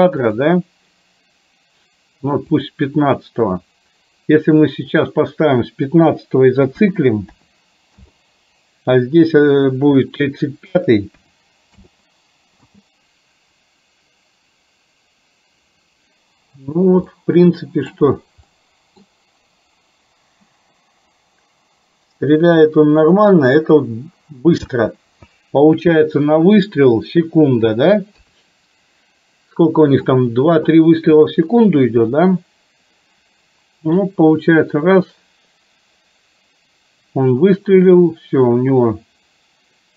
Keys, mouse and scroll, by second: 0.4 click, 2.5 click, 5.0-8.0 drag, 9.7-11.9 drag, 12.7 space, 17.2-18.0 middle drag, 18.5-19.2 middle drag, 24.8 space, 26.8 KP_1, 28.2 KP_3, 34.0-39.9 drag.